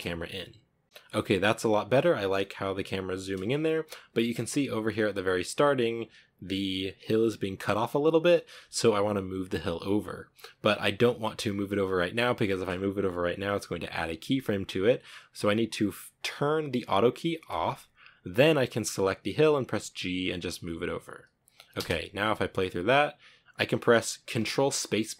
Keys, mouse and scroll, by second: 0.8 scroll up 5, 2.4 scroll up 1, 2.7 scroll down 2, 3.5 space, 3.9-17.9 drag, 17.9 right click, 19.0 g, 21.0 space.